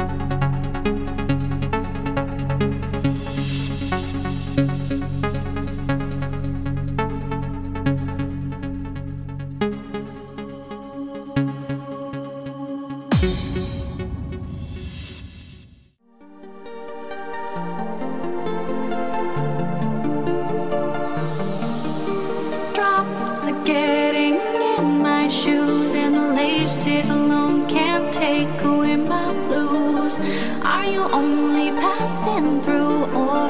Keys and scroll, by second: 2.9 w, 4.7 w, 6.7 w, 8.9 q, 11.2 q, 16.9 w, 19.5 q, 22.3 w, 25.6 q, 29.5 w, 32.0 w.